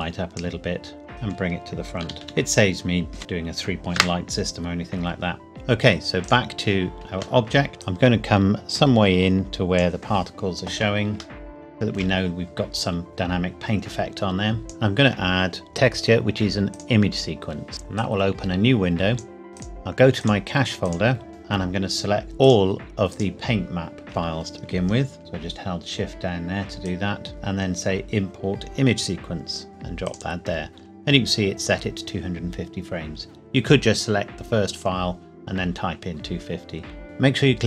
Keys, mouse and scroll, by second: 1.1-2.0 scroll down 1, 2.0 g, 2.1 click, 4.0 KP_0, 5.5 click, 7.4 shift+middle click, 8.1 click, 11.3 shift+middle click, 13.1-14.6 scroll down 2, 14.6 click, 16.7 click, 19.5 click, 24.0 scroll down 1, 25.2 shift+click, 26.8 click, 29.7 click, 30.0 click, 30.5-31.9 scroll up 2, 31.9-32.9 scroll up 1.